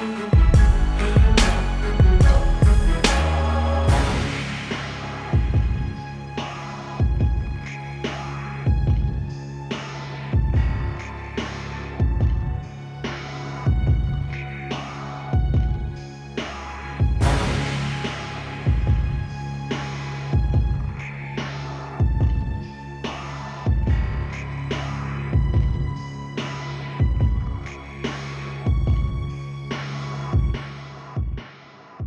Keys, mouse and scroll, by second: 7.4 ctrl+l, 8.9 click, 11.1 Return, 12.0 click, 14.2 ctrl+alt+click, 15.1 ctrl+t, 15.4 right click, 15.9 click, 17.9 alt+click, 19.5 click, 21.1 Return, 22.3 click, 28.7 ctrl+t, 30.3 click.